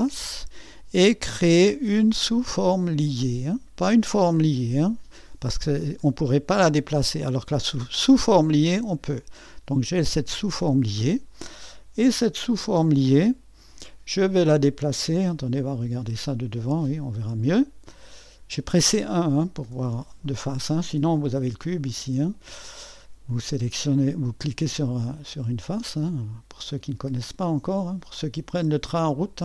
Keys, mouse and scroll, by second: 0.0-6.8 drag, 8.8-13.4 drag, 13.3-14.1 typing, 15.7 1, 16.7-18.0 drag, 18.2-19.5 drag, 19.7 typing, 20.2-21.4 drag, 21.7-29.4 drag, 29.1-29.4 typing.